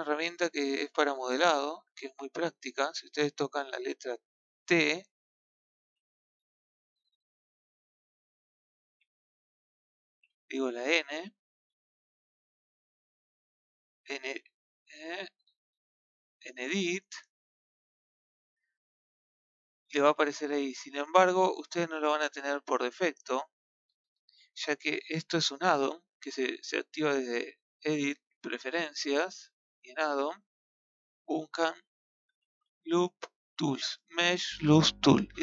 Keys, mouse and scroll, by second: 0.0 click, 0.7-1.1 scroll up 2, 1.1-1.5 scroll down 3, 1.5-5.0 shift+middle drag, 5.0 t, 5.9 y, 9.4 t, 9.9 t, 10.9 b, 11.2 n, 25.7-28.7 ctrl+middle drag, 28.7-34.8 drag.